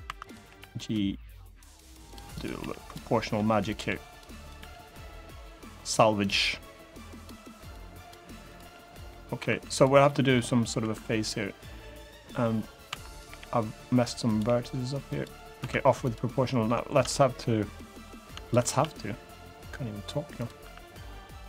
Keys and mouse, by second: 0.0 click, 0.2 g, 1.8 click, 2.1 click, 2.3 g, 2.5 click, 2.9 middle click, 3.5 click, 3.8 g, 4.1 click, 5.5 click, 5.5 g, 6.0 click, 6.8 g, 6.9 click, 7.3 click, 7.7 click, 7.7 g, 8.6 click, 8.6 g, 8.8 middle click, 9.2 3, 9.5 click, 9.8 middle click, 10.5 1, 12.0 2, 12.6 1, 12.8 click, 13.0 g, 13.6 click, 14.0 click, 14.2 g, 14.8 click, 15.3 3, 16.0 middle click, 16.8 middle click, 17.5 middle click, 18.5 r, 20.1 click, 20.3 r, 21.1 click, 21.3 g.